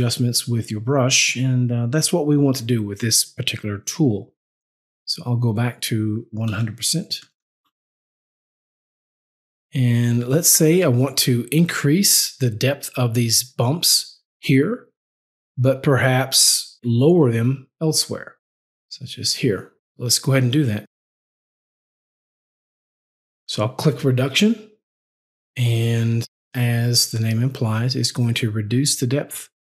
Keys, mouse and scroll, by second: 5.4 click, 6.7 KP_1, 7.1 KP_0, 7.6 KP_Enter, 17.7 click, 24.9 click, 28.4 click.